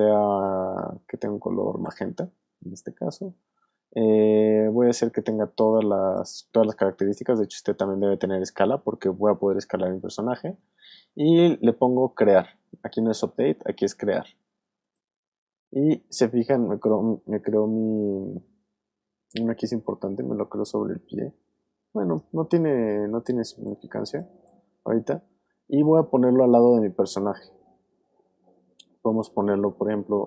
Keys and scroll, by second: 23.8 alt+space, 24.7 space, 30.0 alt+space.